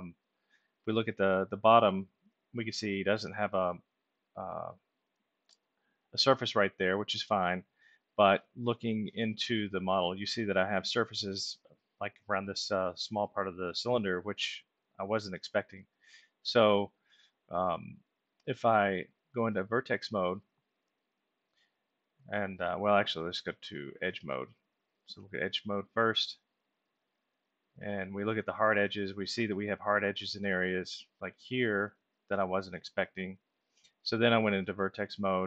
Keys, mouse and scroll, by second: 0.7-1.3 middle drag, 2.1-3.2 alt+middle drag, 5.6-7.5 alt+middle drag, 8.3 middle click, 18.0-18.6 middle drag, 19.8 click, 21.2-22.2 alt+middle drag, 23.4 click, 26.6 click, 27.4 click, 28.7 alt+middle click, 29.7 ctrl+alt+middle click, 34.9 click.